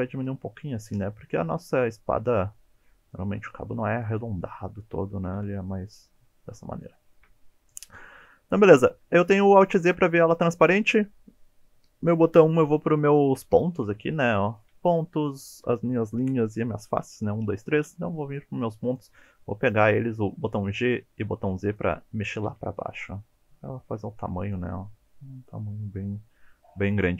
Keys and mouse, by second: 4.1 click, 5.4 KP_1, 7.0 shift+middle click, 9.3 alt+z, 9.9 click, 13.6-16.3 typing, 17.9 1, 18.4 click, 20.4 g, 20.8 z, 21.7 click, 22.3 g, 22.5 z, 24.5 click.